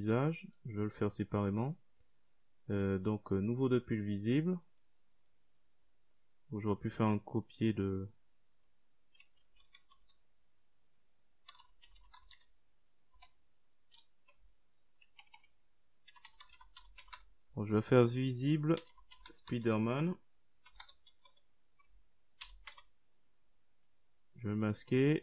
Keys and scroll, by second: 7.2 Delete, 9.3-11.1 typing, 12.3 BackSpace, 13.8-20.4 typing, 20.7 Return.